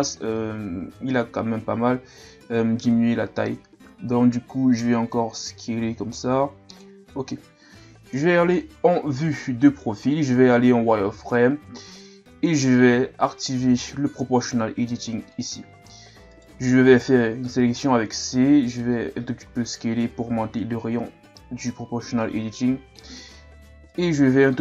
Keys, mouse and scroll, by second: 0.8 s, 8.1 KP_3, 9.4-10.2 scroll up 1, 10.2-11.1 scroll up 1, 11.1 z, 11.6-12.7 scroll up 1, 15.3 click, 16.3 right click, 17.4 c.